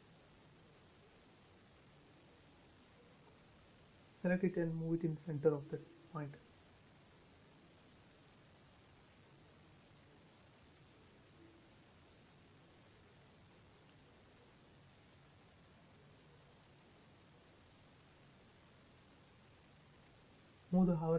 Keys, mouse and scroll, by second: 1.0 scroll down 1, 3.1 scroll up 1, 5.7 click, 5.9 space, 6.2 middle click, 6.7 scroll down 1, 7.7 shift+middle click, 8.2 scroll down 1, 10.8 shift+middle click, 10.9 shift+middle click, 11.7-13.8 scroll up 1, 15.0 click, 15.7-16.7 scroll up 1, 16.7 click, 17.6 m, 18.0 click, 19.3 Up, 19.6 click, 19.8 space.